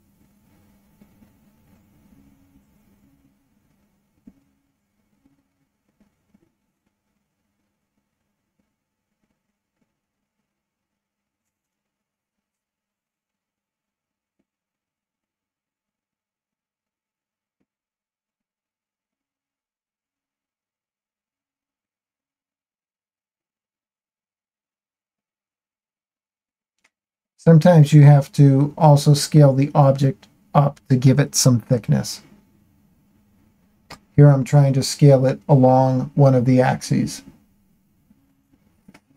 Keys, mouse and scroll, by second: 0.4 2, 2.4 shift+middle click, 5.4-8.4 shift+drag, 9.6-13.6 shift+middle drag, 14.5-17.1 shift+middle drag, 18.3 shift+middle click, 20.7-23.0 drag, 24.7 s, 25.3 x, 26.8 y, 28.0 z, 31.3 click, 31.9-35.2 shift+middle drag, 35.2 shift+click, 37.5 ctrl+z, 38.1-39.1 shift+middle drag.